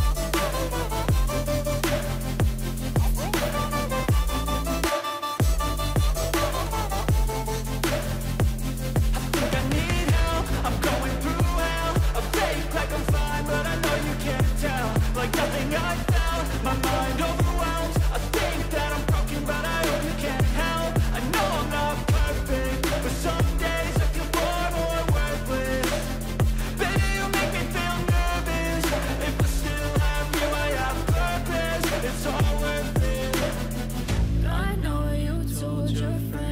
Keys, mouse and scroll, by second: 1.3 l, 2.9-4.2 typing, 7.1 ctrl+a, 14.7 ctrl+d, 15.2-16.5 scroll down 21, 16.8 scroll up 2, 18.0 shift+click, 19.5 ctrl+g, 23.8 ctrl+z, 25.2 ctrl+t, 30.8-31.5 scroll down 10, 32.4 scroll down 1, 32.6-34.9 scroll up 31.